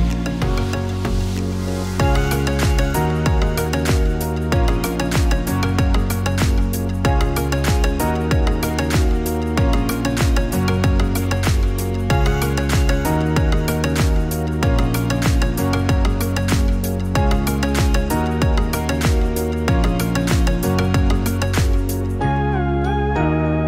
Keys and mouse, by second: 7.0-21.0 drag, 22.7 click.